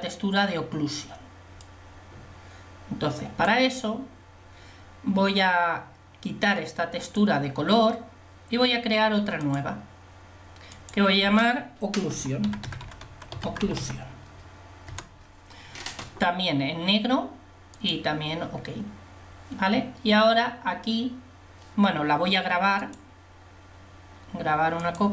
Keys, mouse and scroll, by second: 2.2-3.2 drag, 7.2-8.7 drag, 15.1 c.